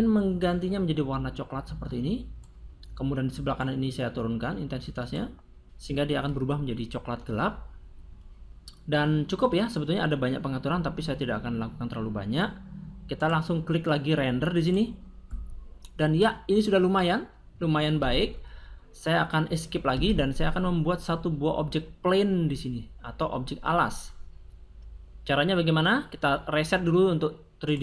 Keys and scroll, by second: 19.8 Escape.